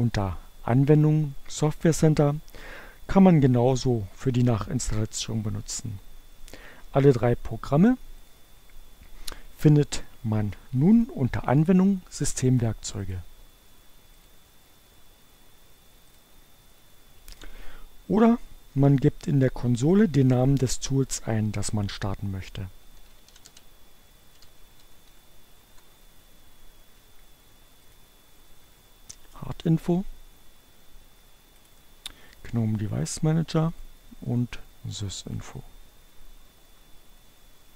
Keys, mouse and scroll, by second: 0.3 click, 8.0 click, 11.1 click, 13.2 click, 14.3 click, 16.3 click, 17.5 click, 22.2-25.4 typing, 28.0 click, 30.0 click, 31.1 click, 33.9 click, 35.3 click.